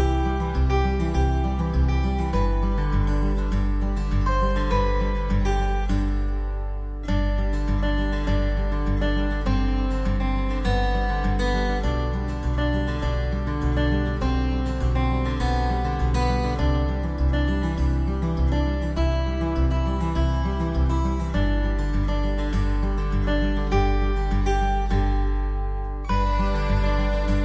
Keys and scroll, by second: 25.9 ctrl+z.